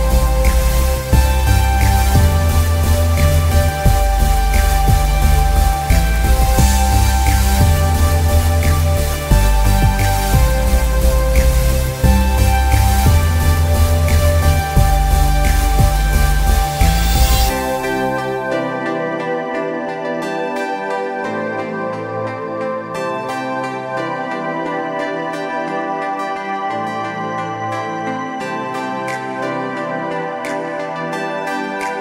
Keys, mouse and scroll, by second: 4.4 space, 4.6 click, 4.8 space, 6.3 click, 8.3 alt+scroll down 1, 9.6 scroll down 1, 14.6 space, 15.4 alt+scroll down 1, 16.1-16.5 alt+scroll up 1, 17.2 scroll up 1, 17.6 space, 17.8 click, 18.1 space, 19.0 click.